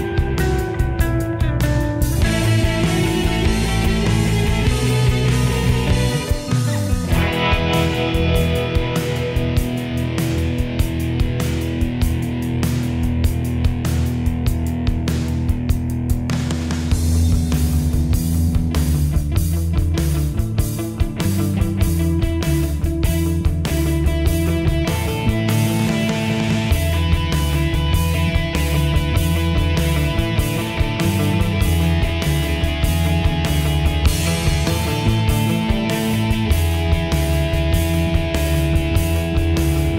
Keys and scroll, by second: 6.2 ctrl+j, 10.0 ctrl+e.